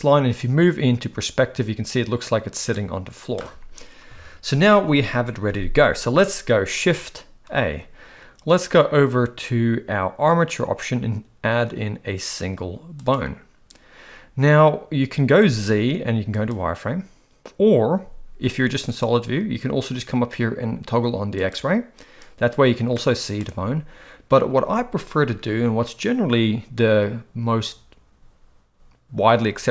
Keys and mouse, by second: 4.1 KP_1, 7.5 shift+a, 15.3 z, 17.9 z, 23.0-23.4 shift+middle drag.